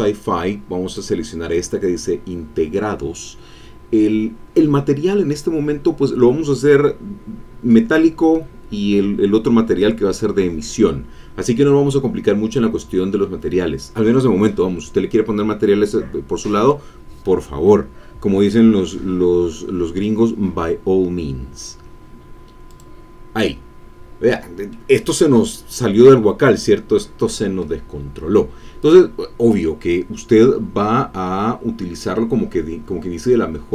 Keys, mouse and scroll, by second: 0.8 click, 22.7 click, 24.7-28.0 drag, 28.8 click, 30.0-31.0 scroll down 4, 32.9-33.4 scroll up 2, 33.4 scroll down 1, 33.6 scroll up 1.